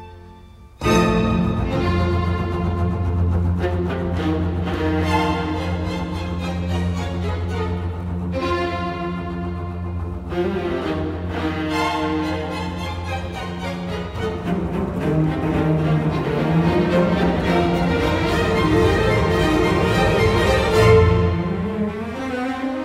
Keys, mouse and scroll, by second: 1.4 t, 1.6 space, 5.8-6.4 typing, 10.4-13.8 typing, 18.4 space, 19.3 Escape.